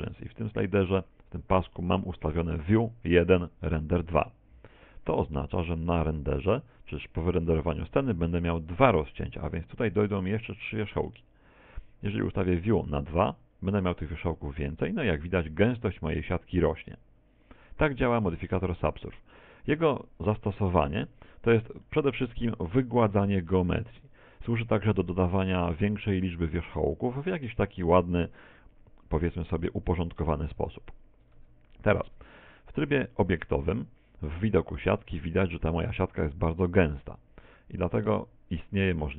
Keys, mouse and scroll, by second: 13.5 click, 18.9 click, 19.5 click, 20.5 Tab, 21.1 z, 21.9 shift+middle click, 22.5 middle click, 23.5 middle click, 25.1-25.7 scroll down 5, 25.9 shift+middle click, 27.9 middle click, 29.7 middle click, 31.4 Tab, 32.1 Tab, 32.5 z, 36.5 click.